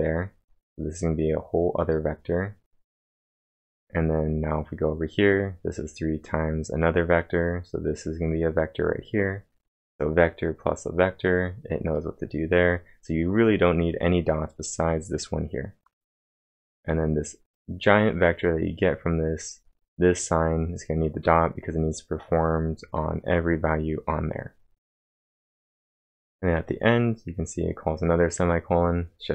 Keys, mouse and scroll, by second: 14.7 click, 16.8-17.6 typing, 20.0-20.9 typing, 20.2 click, 24.9 click.